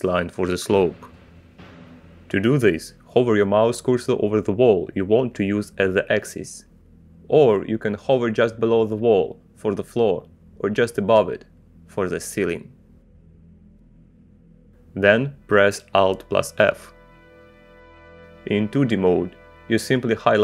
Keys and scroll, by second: 18.3 alt+f.